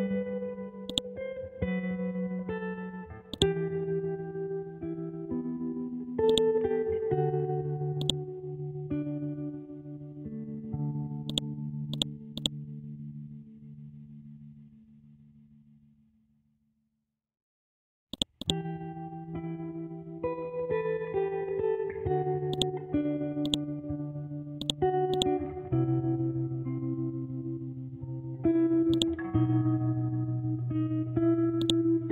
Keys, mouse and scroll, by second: 0.5-0.9 scroll down 1, 0.9-3.3 drag, 4.7-6.1 scroll up 1, 6.3 right click, 6.7 scroll down 1, 7.5 scroll up 1, 8.0-11.3 drag, 11.7 c, 11.9 click, 12.7 Down, 18.1-19.9 drag, 19.9 ctrl+Home, 22.5 click, 22.9-23.4 scroll up 1, 23.4 click, 25.5 scroll down 1, 26.6-28.2 scroll up 1, 28.4 scroll down 1, 28.9 click, 29.5 scroll up 1, 29.9 Down, 31.5 shift+click.